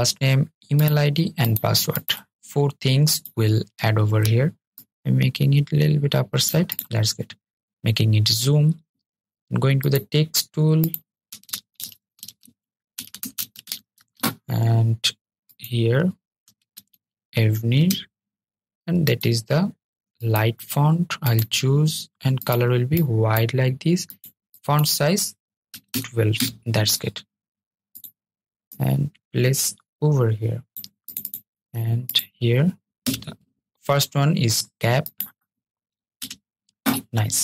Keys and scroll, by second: 13.0 super+a, 14.4 super+a.